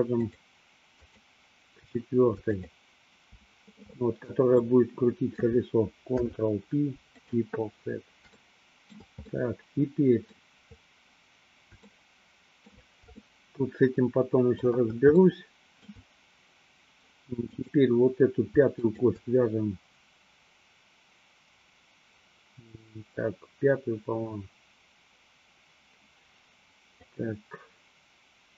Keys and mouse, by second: 0.3 shift+click, 1.2 shift+click, 2.6 shift+click, 4.1 middle click, 6.2 ctrl+p, 8.6 shift+middle click, 9.4-10.6 middle drag, 12.1 shift+middle click, 13.3-14.8 shift+middle drag, 15.3 shift+middle click, 17.6 click, 19.1 shift+click, 26.9 click.